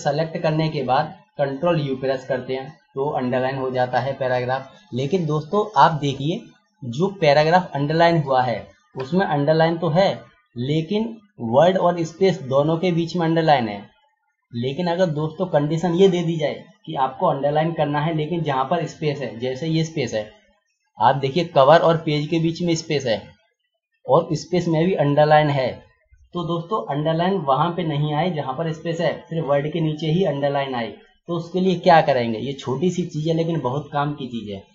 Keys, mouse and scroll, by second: 1.8 ctrl+u, 6.0 click, 6.1 double click, 7.8 click, 13.4 click, 20.0 click.